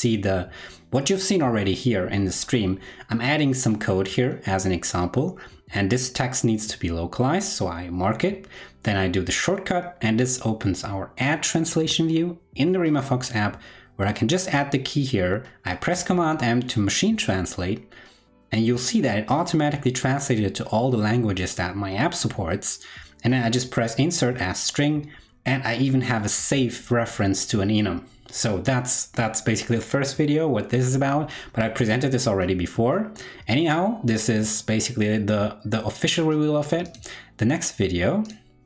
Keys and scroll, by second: 7.9 super+l, 14.7 super+m.